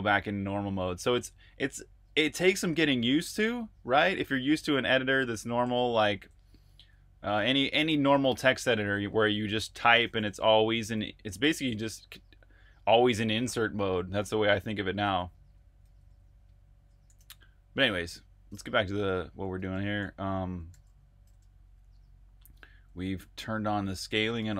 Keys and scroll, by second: 4.2 super+Tab, 5.9 super+Tab, 9.4-10.2 typing, 12.1 typing, 14.9 super+z, 17.1 super+Tab, 19.4 shift+super+Tab, 21.3-22.5 typing, 24.3 super+r, 24.3-24.5 typing.